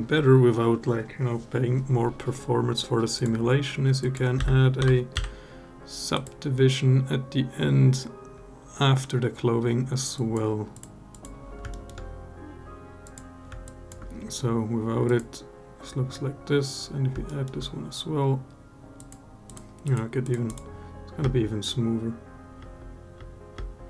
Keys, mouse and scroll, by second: 2.9-6.1 drag, 10.0 click, 10.9 click, 11.5 alt+middle drag, 12.8 click, 13.4 alt+drag, 14.8 click, 17.0 alt+middle drag, 19.2 click, 19.6 click, 20.0 click, 21.0 space, 22.4 space, 22.9 space, 23.4 space.